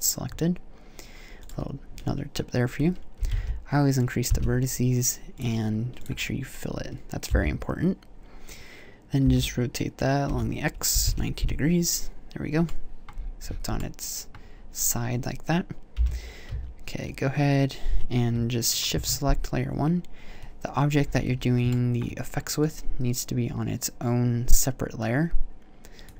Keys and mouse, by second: 7.1 t, 9.0 r, 15.7 m, 19.2 shift+1.